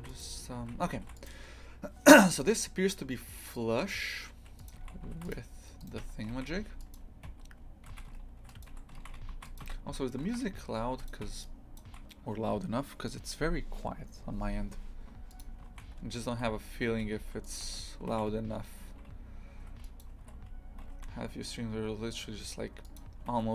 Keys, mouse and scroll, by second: 0.6 shift+f, 4.7 click, 4.8 shift+f, 5.8 right click, 6.1 Tab, 6.3 shift+f, 7.4-10.3 typing, 11.8 shift+click, 15.7 shift+f, 17.7 z, 18.1 shift+f, 20.3 g.